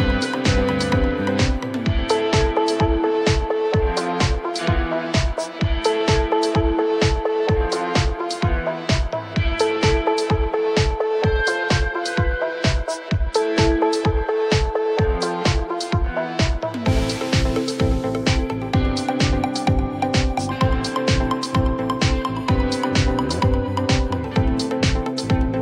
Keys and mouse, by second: 7.2 click.